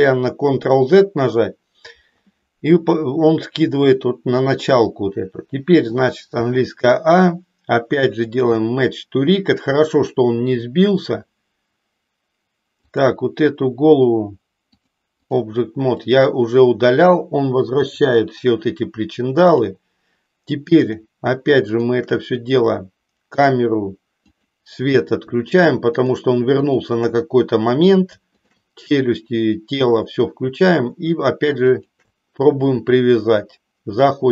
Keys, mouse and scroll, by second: 8.2-10.9 drag, 14.7 click, 17.7 Delete, 19.6 click, 20.8 click, 21.6 shift+click, 23.5 click, 24.3 click, 25.9 shift+click, 26.6 shift+click, 31.7 shift+click.